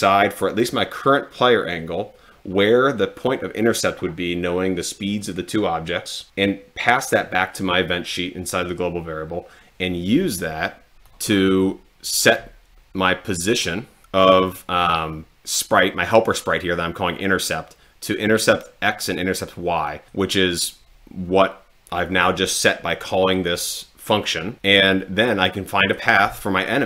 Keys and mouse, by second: 11.1 click, 20.1 click, 25.8 click.